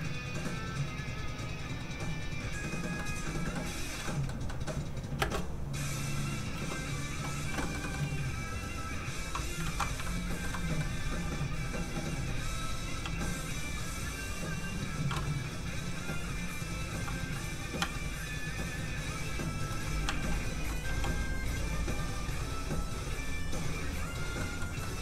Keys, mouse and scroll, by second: 3.0 middle click, 5.2 space, 7.6 shift+middle click, 7.8 middle click, 7.9 middle click, 8.6 click, 9.6 ctrl+z, 10.0 shift+middle click, 10.5 middle click, 10.6 middle click, 11.2 f, 11.4 click, 12.1 f, 12.3 click, 13.0 f, 13.2 click, 16.3 ctrl+click, 16.9 ctrl+z, 18.3 ctrl+click, 19.7 ctrl+z, 20.0 ctrl+z, 20.8 z, 20.9 f, 21.1 click, 24.4 middle click.